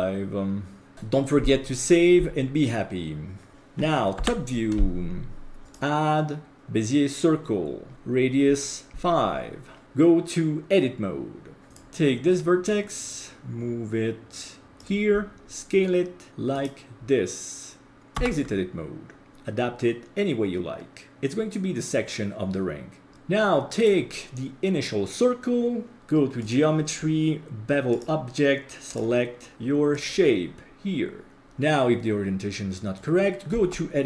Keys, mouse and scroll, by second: 0.9 ctrl+s, 4.2 ctrl+s, 4.2 KP_7, 5.6-6.6 drag, 8.9 click, 9.8 Tab, 11.7 click, 11.7 right click, 12.7-14.8 drag, 15.4 s, 18.2 Tab, 23.1 middle click, 23.8 right click, 26.0-26.4 scroll down 4, 26.4 click, 27.0-27.9 scroll down 2, 27.9 click, 28.9-30.0 drag, 31.4-32.9 middle drag, 33.5 Tab.